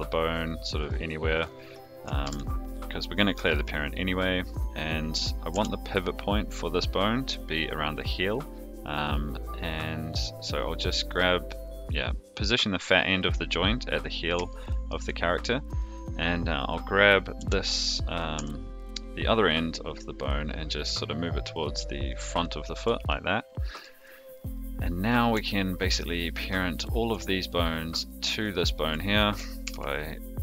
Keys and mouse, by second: 1.3 click, 2.2 alt+p, 5.5 g, 10.5 click, 14.4 shift+middle click, 15.6 click, 17.3 g, 23.0 shift+middle click, 25.8 shift+click, 26.4 shift+click, 28.5 shift+click, 29.6 ctrl+p.